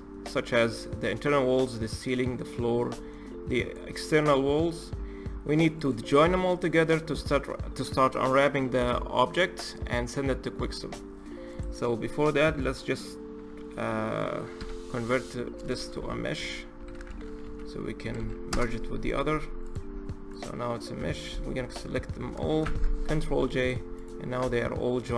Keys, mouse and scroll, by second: 2.5-2.8 scroll down 2, 2.8-3.4 middle drag, 3.4 click, 4.1-4.6 middle drag, 4.6-5.1 scroll up 2, 5.1-5.6 scroll down 2, 5.6 click, 5.9-6.3 scroll down 1, 6.3-9.3 middle drag, 10.4-11.3 scroll up 5, 11.3 click, 11.7-12.4 scroll up 1, 12.4 click, 14.4 F3, 18.0 Down, 19.4 click, 19.6-20.1 scroll down 3, 20.1 click, 20.8 a, 22.4 ctrl+j, 23.4 click, 23.8 click, 24.7-25.0 scroll down 3, 25.0-25.1 middle drag.